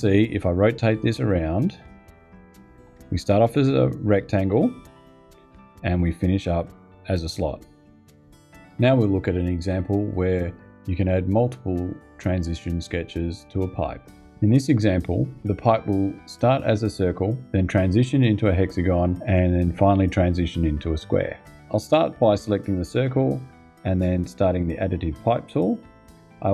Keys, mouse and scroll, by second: 1.4-3.7 scroll up 2, 4.4 scroll down 2, 5.7-8.7 scroll up 2, 22.7 click, 25.7 click.